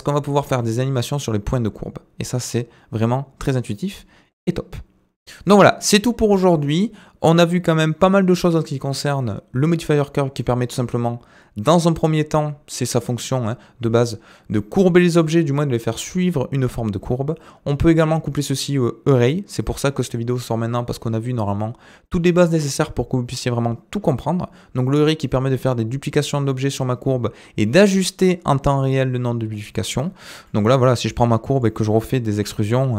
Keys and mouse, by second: 30.4 middle drag, 31.0 click, 31.2 Tab, 32.3 e.